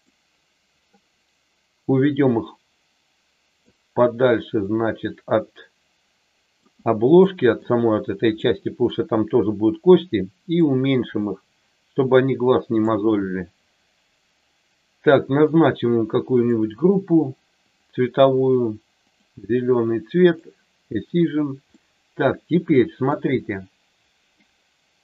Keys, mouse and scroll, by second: 2.1-3.6 drag, 4.6-6.6 drag, 7.2 middle click, 8.3 middle click, 10.6-12.8 drag, 15.3 click, 16.3 click, 17.7-19.2 drag, 21.7-23.1 middle drag.